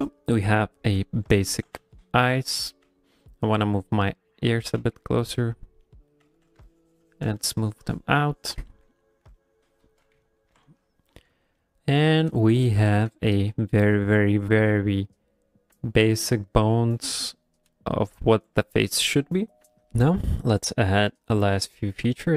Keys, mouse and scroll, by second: 1.5 g, 2.5 click, 2.5 f, 2.8 f, 3.3 click, 3.7 click, 4.8 f, 5.4 click, 5.8 middle click, 6.2 f, 6.7 shift+click, 7.3 f, 7.6 shift+click, 8.5 shift+click, 8.7 ctrl+middle click, 8.9 middle click, 9.3 middle click, 9.8 ctrl+middle click, 10.1 KP_1, 10.5 KP_1, 10.5 KP_0, 11.6 middle click, 11.6 ctrl+middle click, 12.5 shift+middle click, 13.0 ctrl+middle click, 14.5 middle click, 15.7 middle click, 15.8 ctrl+middle click, 16.9 middle click, 17.7 middle click, 19.9 right click, 20.6 middle click, 21.8 ctrl+middle click.